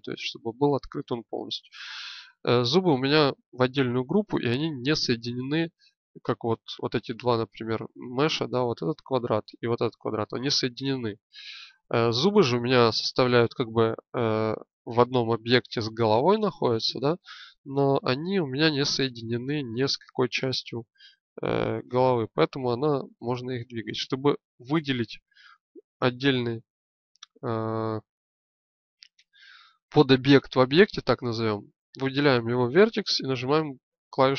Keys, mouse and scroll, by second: 20.6-22.3 drag, 28.6-29.7 drag, 33.3 l.